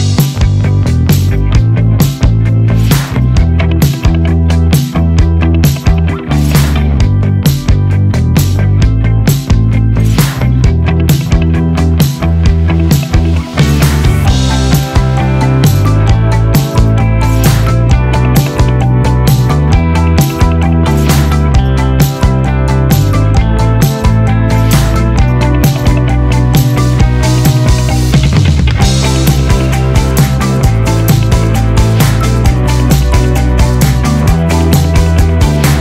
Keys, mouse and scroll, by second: 1.0 click, 3.6-4.4 scroll down 1, 5.4 click, 9.1-9.9 typing, 11.7 click, 13.1 typing, 14.7-16.7 typing, 14.8 click, 17.8 click, 20.9 typing, 22.8-23.5 typing, 23.3 click, 25.6-27.9 typing, 28.2 click, 30.1-31.8 typing, 34.0 click, 35.1-35.8 typing.